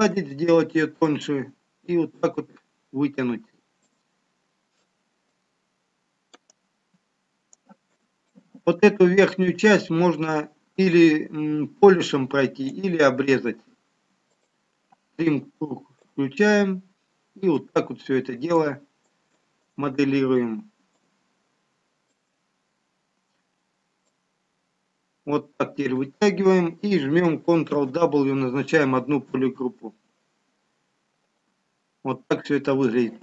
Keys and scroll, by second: 30.0 ctrl+w.